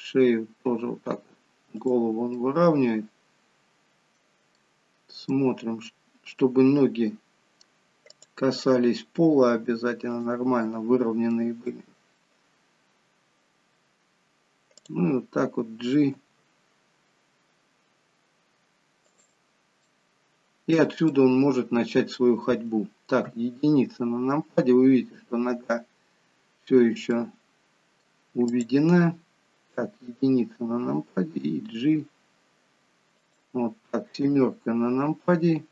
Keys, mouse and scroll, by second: 2.3 middle click, 4.5 middle click, 8.0 middle click, 8.0 click, 9.3 r, 10.6 middle click, 11.7 middle click, 12.6-13.2 scroll up 1, 14.8 click, 16.1 g, 19.7 middle click, 21.1 middle click, 23.2 KP_1, 27.1 middle click, 28.5 click, 29.7 KP_1, 31.6 g, 34.2 KP_7.